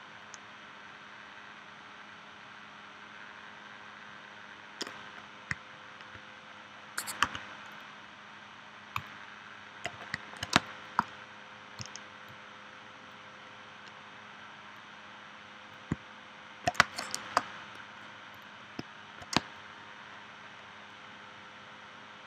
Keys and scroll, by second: 7.2 a, 10.5 space, 16.8 space, 19.3 space.